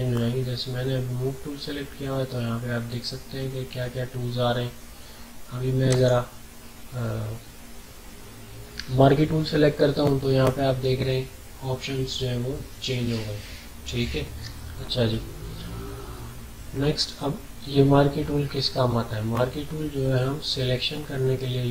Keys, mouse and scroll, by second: 5.8 click, 19.8-20.2 scroll down 1, 20.6 alt+scroll up 1, 21.0-21.7 typing, 21.2 alt+scroll up 1.